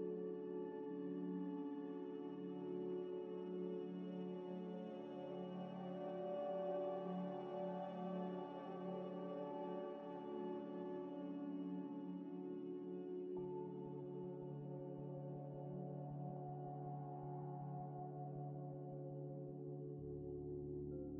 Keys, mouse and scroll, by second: 0.0-3.8 typing, 0.2 Return, 1.9 Return, 3.2 Return, 6.3-8.7 typing, 9.1 ctrl+ئ, 9.9-10.7 typing, 14.0-15.6 typing, 17.0 غ, 17.3 shift+click, 18.6 shift+click, 18.7 ل, 19.5 ل, 20.6 scroll up 1.